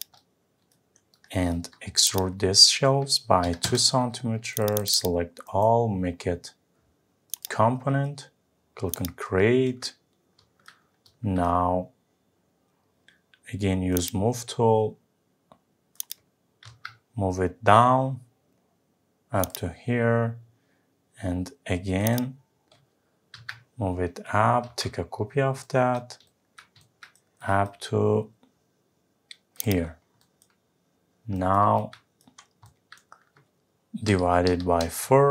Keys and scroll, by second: 3.7 Return, 16.6 Up, 23.3 Up, 34.8 Return.